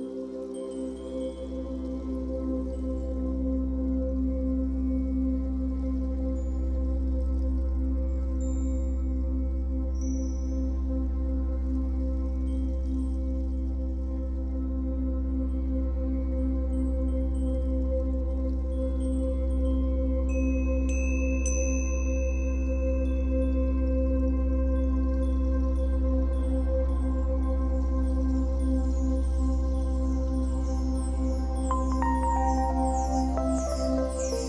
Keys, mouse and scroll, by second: 5.6-7.7 drag, 6.7 ctrl+z, 7.9 click, 9.6-16.5 drag, 15.6-16.1 scroll down 2, 16.1-16.5 scroll up 2, 16.5-18.9 middle drag, 18.9-21.7 drag, 21.5 scroll down 1, 21.7-28.4 middle drag, 22.5 scroll down 1, 23.7 ctrl+z, 24.7 scroll up 1, 25.1 ctrl+z, 27.3 scroll down 1, 28.4 click, 28.7 scroll up 1, 28.8-30.6 middle drag, 30.6-34.0 drag, 34.0-34.4 middle drag.